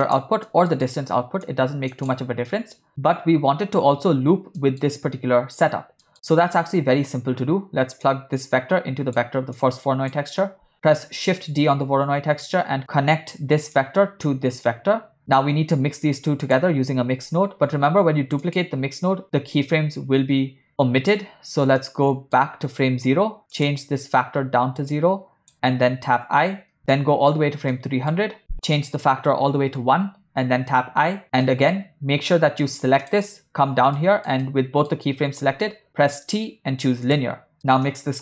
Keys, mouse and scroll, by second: 0.5 middle click, 1.5 drag, 1.6 click, 2.5 middle click, 4.6 middle click, 6.1 middle click, 8.1-9.2 drag, 9.6 click, 11.1 shift+d, 13.8-15.3 drag, 15.3 middle click, 16.5 click, 17.3 shift+d, 21.9 middle click, 23.9 click, 25.0 click, 26.3 i, 27.0 middle click, 27.8 middle click, 28.8-29.8 drag, 30.9 i, 31.2 ctrl+middle click, 31.5 middle click, 33.0 click, 33.9 middle click, 34.4 ctrl+middle click, 36.1 t, 37.7 middle click, 37.9-38.2 drag.